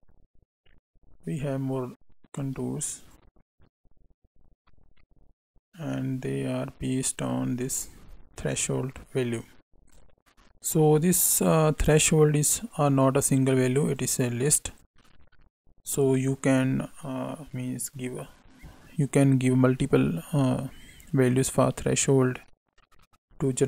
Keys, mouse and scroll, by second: 3.0 click, 8.0-9.9 scroll up 6, 9.9 click, 10.2 middle click, 10.2 scroll down 2, 12.7 click, 20.2 click.